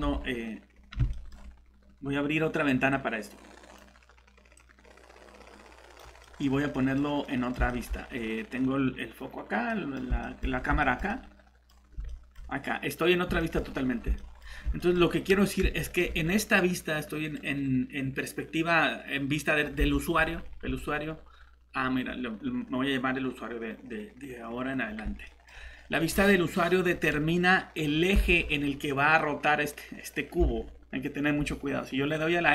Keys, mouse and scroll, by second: 0.0 alt+Tab, 1.1 middle click, 2.9 click, 6.2 middle click, 6.4-6.7 scroll down 1, 6.7 middle click, 6.8 scroll up 1, 7.0 scroll down 1, 7.1 scroll up 1, 7.2 middle click, 8.2 scroll down 1, 9.7 middle click, 10.4 scroll down 1, 10.8 middle click, 11.7 scroll up 1, 12.1 middle click, 13.6 scroll up 1, 14.2 middle click, 14.5 scroll down 1, 14.8 middle click, 28.2 alt+shift+Tab, 30.4 alt+Tab.